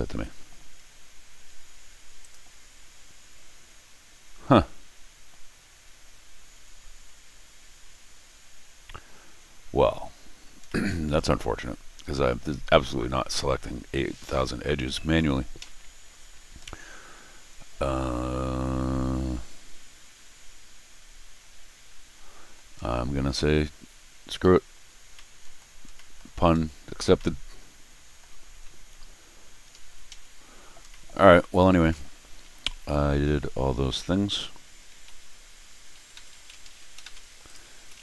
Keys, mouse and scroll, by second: 0.4 middle click, 2.2 click, 9.3 middle click, 10.1-11.1 middle drag, 11.5 middle click, 15.6 Escape, 16.1-16.6 scroll up 2, 16.6-22.5 middle drag, 24.8-25.1 scroll down 2, 25.1 middle click, 25.9 middle click, 26.5 scroll up 1, 27.1-28.2 middle drag, 28.4 scroll down 1, 29.7 Escape, 30.1 Escape, 30.8 middle click, 31.6 middle click, 31.9 middle click, 34.9 shift+Tab, 35.9 shift+Tab, 36.1 shift+Tab, 36.3 shift+Tab, 36.7 shift+Tab, 37.0 shift+Tab, 37.4 click, 37.7 shift+Tab, 37.9 shift+Tab.